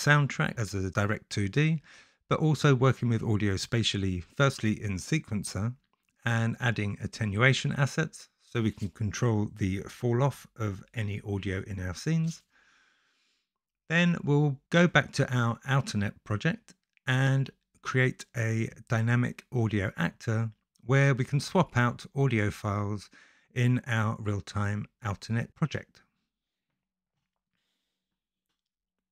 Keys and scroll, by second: 17.3 shift+s, 19.4 s, 24.6-26.0 typing.